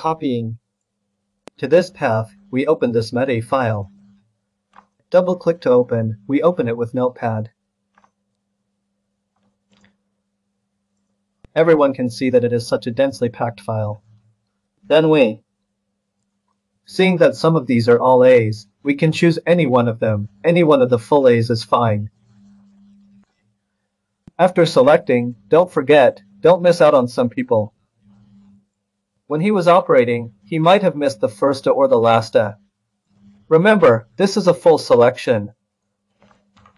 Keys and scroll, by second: 8.6-9.3 scroll, 36.5 ctrl+h.